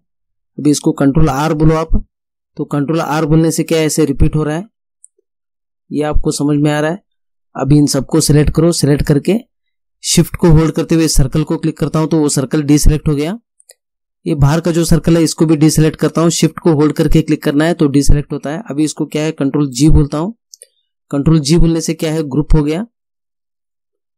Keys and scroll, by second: 1.4 ctrl+r, 3.8 ctrl+r, 19.8 ctrl+g.